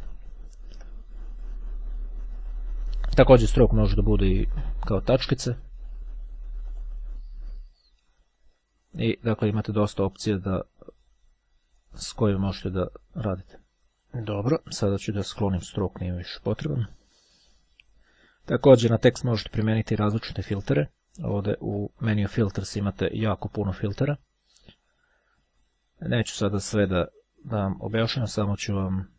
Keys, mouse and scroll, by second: 0.6-1.1 ctrl+scroll down 2, 3.3 click, 4.3 click, 5.6-6.2 scroll down 1, 6.8 click, 8.0-8.5 ctrl+scroll up 1, 8.8-9.8 scroll down 2, 10.2 click, 11.1 click, 11.9 click, 12.9-13.5 ctrl+scroll down 1, 13.7 ctrl+scroll down 1, 13.8 click, 16.0-17.0 right drag, 17.0 click, 19.5 click.